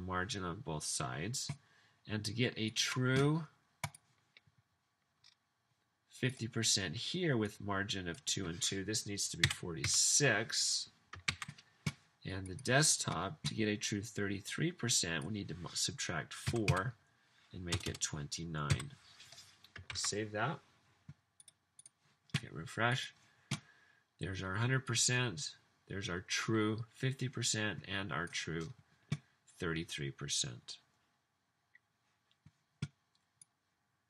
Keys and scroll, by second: 9.5-9.8 typing, 11.3 super+s, 16.3-18.4 typing, 20.0 super+s.